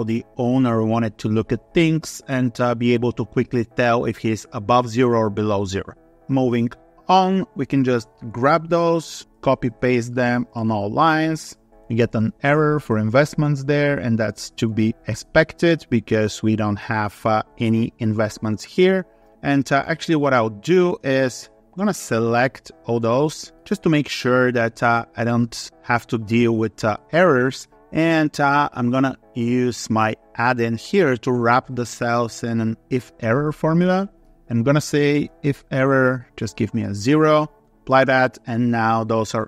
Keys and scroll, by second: 8.6 ctrl+c, 9.3 ctrl+v, 10.1 ctrl+v, 10.5 ctrl+v, 10.9 ctrl+v, 12.8 ctrl+v, 14.5 ctrl+v, 14.9 ctrl+v.